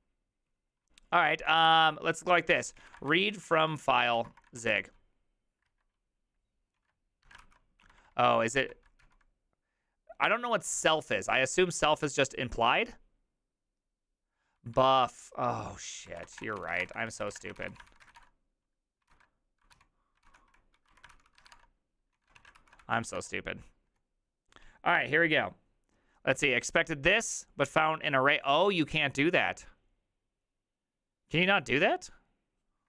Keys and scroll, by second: 1.6 ctrl+t, 2.4-9.0 typing, 14.5-23.3 typing, 19.1 ctrl+c, 20.2 ctrl+c, 22.1 Return, 22.1 ctrl+a.